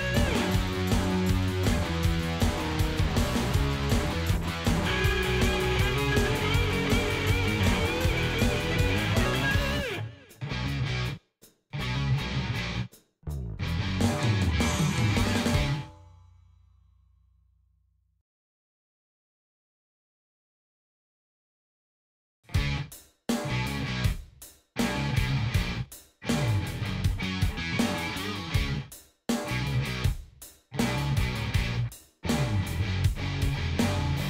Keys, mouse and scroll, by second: 0.5 click, 1.6 click, 2.6 click, 5.3 click, 6.0 click, 7.3 click, 8.4 click, 10.6 click, 11.0 click, 11.6 ctrl+s, 12.7 ctrl+shift+e, 14.3 click, 17.6 click, 19.7 click, 20.3 ctrl+s, 21.6 click, 22.2 click, 32.5 click.